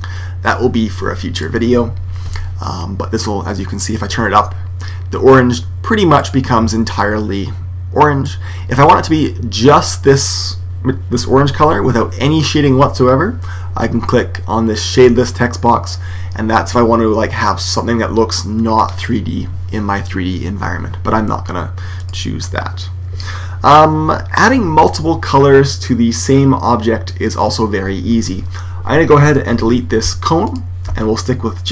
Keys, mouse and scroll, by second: 2.5 click, 6.9 click, 14.9 click, 21.9 click, 29.9 x, 31.6 right click.